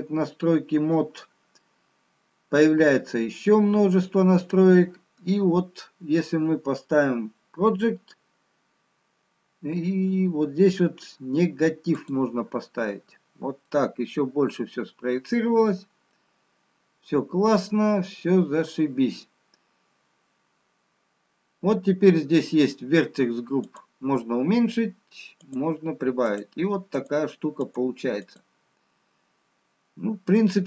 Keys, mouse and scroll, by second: 2.3-3.1 scroll down 2, 3.1-4.0 scroll down 3, 13.1 click, 14.3 middle click, 14.3-14.6 scroll down 1, 24.7 click, 26.2 click, 27.0 click, 27.7 click, 28.5 click, 29.5 click, 30.5 scroll up 5.